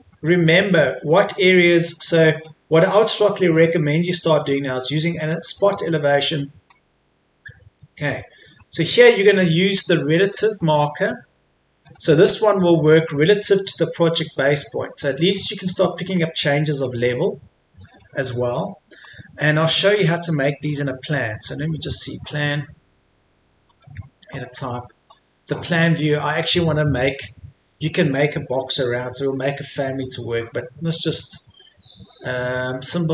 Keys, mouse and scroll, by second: 3.2 click, 6.2-6.7 scroll up 1, 8.6-9.0 scroll down 1, 9.0 middle click, 10.6-16.0 drag, 16.6 scroll up 1, 16.8-17.4 scroll down 1, 17.9 click, 19.1-21.4 scroll down 1, 21.4 click.